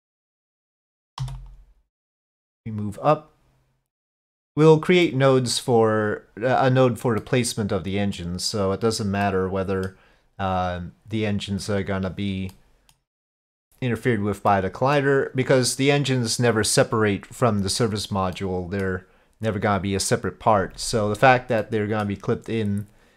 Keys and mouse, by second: 0.4 click, 1.2 3, 1.4 click, 2.4-4.7 drag, 5.1 middle click, 7.3 middle click, 9.3 middle click, 12.6 middle click, 14.5 middle click, 18.4 middle click, 21.7 middle click.